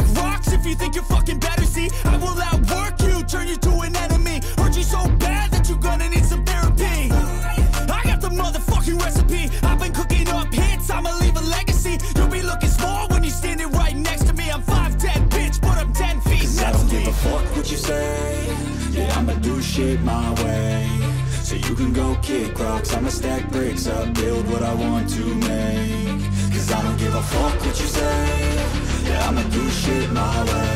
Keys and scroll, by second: 2.1 ctrl+=, 3.1 ctrl+z, 4.2 ctrl+z, 5.7 space, 7.0 space, 7.6 ], 9.3 ctrl+z, 12.1 space, 13.5 space, 17.4 ctrl+-, 18.0 ], 19.1 ctrl+z, 20.0 ctrl+z, 22.9 ], 24.0 ], 24.3 ctrl+z, 24.6 ], 25.7 space, 28.2 ctrl+=, 29.5 ctrl+=.